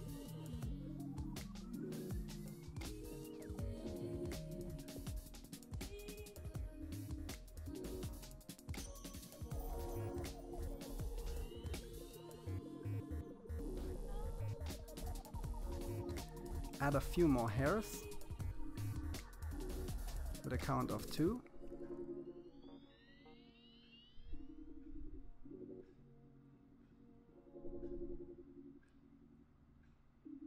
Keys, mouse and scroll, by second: 5.0-6.7 drag, 7.8-9.3 middle drag, 10.2-13.2 middle drag, 17.4 click, 18.3 middle click, 19.1-20.5 scroll up 1, 20.6-21.6 scroll up 1, 21.6-22.3 scroll up 1, 22.3-23.0 scroll up 1, 26.5-27.7 scroll up 1, 27.7 scroll up 1.